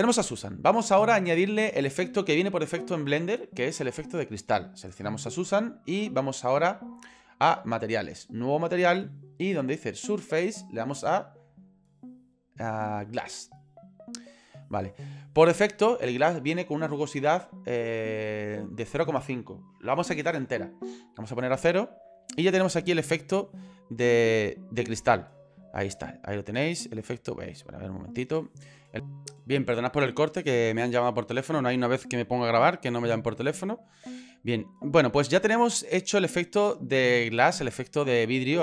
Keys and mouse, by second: 7.5 click, 8.6 click, 11.4-13.6 drag, 20.8 click, 22.6 middle click, 23.8 middle click, 24.8 middle click, 25.4-26.5 middle drag, 27.4 middle click, 27.9 click, 28.2 middle click, 28.3 middle click, 34.0 middle click, 34.1 click, 35.0 middle click, 37.4 middle click.